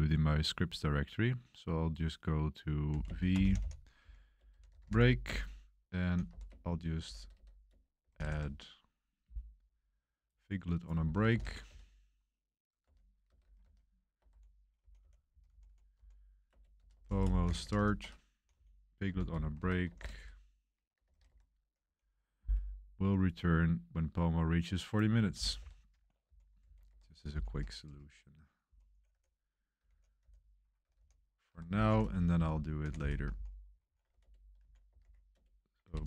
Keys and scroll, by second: 2.6-7.6 typing, 7.6 Return, 8.1 ctrl+b, 11.3 ctrl+b, 12.8-21.7 typing, 13.3 Escape, 14.1 Escape, 16.4 Return, 23.2 ctrl+b, 25.3 ctrl+b, 25.5 ctrl+b, 26.2-36.0 typing, 26.6 super+v, 26.8 Home.